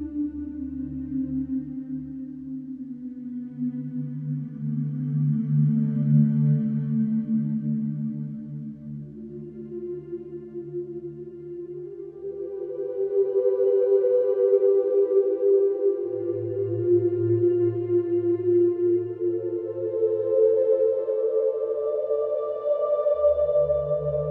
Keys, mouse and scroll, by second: 12.4 click.